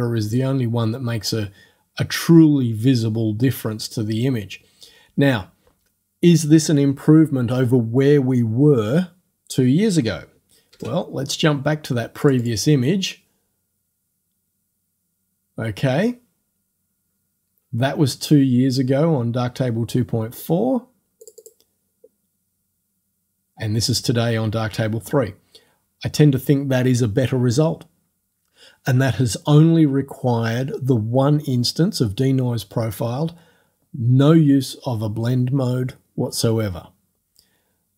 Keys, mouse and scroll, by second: 10.7 ctrl+f, 12.2 click, 12.6-14.4 middle drag, 14.4 click, 14.5-15.9 middle drag, 21.2 click.